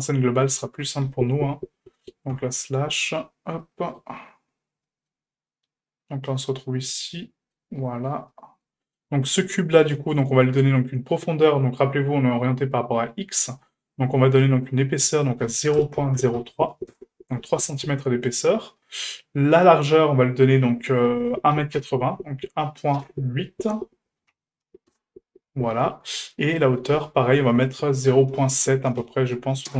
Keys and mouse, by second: 0.0 click, 0.0 n, 2.3 KP_Divide, 3.6-4.0 shift+middle drag, 4.8 shift+middle drag, 6.3 middle click, 7.1-7.5 shift+middle drag, 7.7 middle drag, 8.3-8.6 shift+middle drag, 9.7 shift+middle drag, 11.8 middle drag, 13.6 shift+middle drag, 14.4 shift+middle drag, 15.2-17.4 drag, 18.1 shift+middle click, 19.2 middle click, 21.0-25.9 drag, 26.5-29.7 drag.